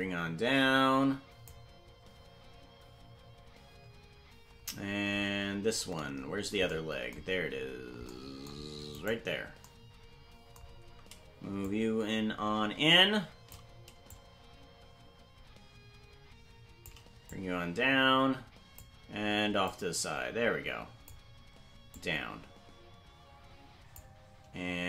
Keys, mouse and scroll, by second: 5.1-5.8 scroll down 3, 5.8-6.7 scroll up 1, 6.7-8.1 scroll up 1, 9.2 right click, 11.6-13.6 shift+drag, 14.1-16.9 shift+drag, 17.3-18.8 drag, 19.6-21.1 drag, 21.9-24.0 drag.